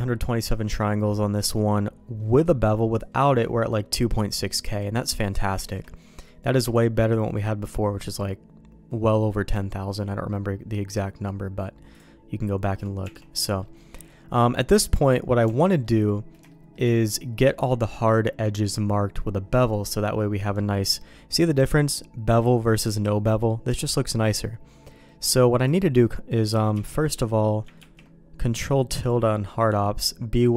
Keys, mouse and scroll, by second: 0.8 middle click, 2.9 click, 4.3 middle click, 4.7 middle click, 5.0 middle click, 5.6 shift+middle click, 6.7 shift+middle click, 11.9 click, 12.6 middle click, 13.0 Tab, 13.3 middle click, 13.8 middle click, 15.4 Tab, 15.8 middle click, 16.4 shift+middle click, 21.0 middle click, 25.0 middle click, 25.6 click, 26.7 q, 27.7 ctrl+`.